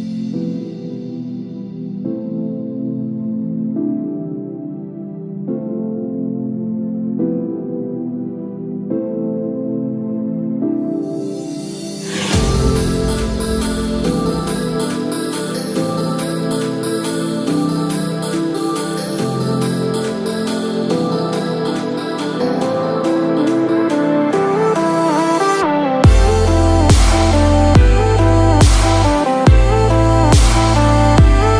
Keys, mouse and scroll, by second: 30.3 right click.